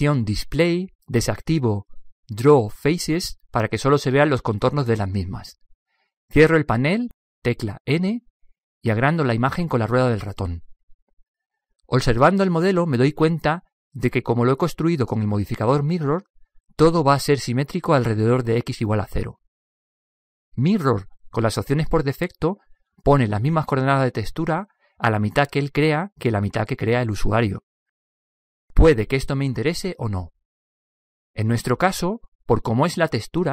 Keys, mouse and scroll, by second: 2.5-4.2 drag, 6.9 n, 7.6 n, 9.4 middle click, 9.5 scroll up 1, 9.5 middle click.